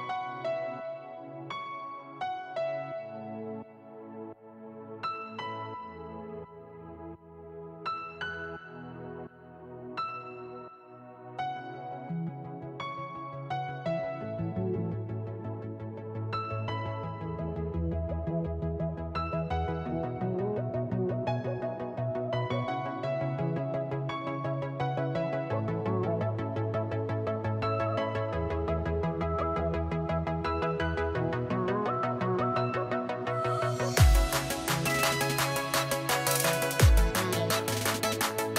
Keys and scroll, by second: 12.4 space, 13.1 ctrl+v, 20.3 space, 25.5 space.